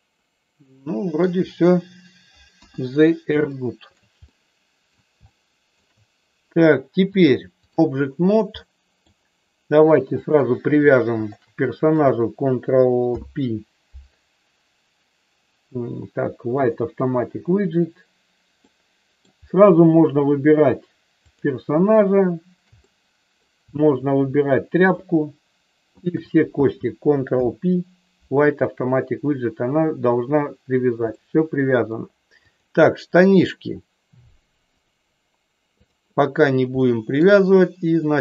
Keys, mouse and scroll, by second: 2.4 KP_1, 3.4 shift+middle click, 4.2 middle click, 5.3 shift+middle click, 7.1 click, 8.5 middle click, 10.2 click, 11.2 shift+click, 12.9 ctrl+p, 18.6 middle click, 21.2 click, 22.8 middle click, 25.9 shift+click, 27.3 ctrl+p, 31.2 middle click, 34.7 click, 35.8 click, 36.8 middle click.